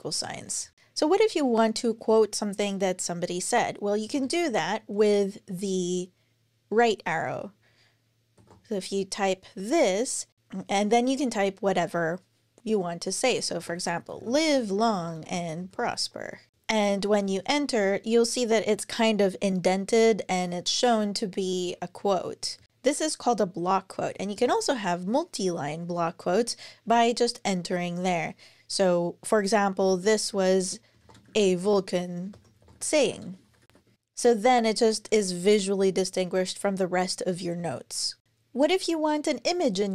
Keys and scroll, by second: 0.0 Down, 3.8 Return, 4.0 Return, 8.1 shift+., 13.1-16.5 typing, 16.5 Return, 21.2 Up, 21.4 Up, 22.4 super+Right, 24.1 Return, 29.6-34.2 typing, 30.1 super+i, 32.1 alt+BackSpace.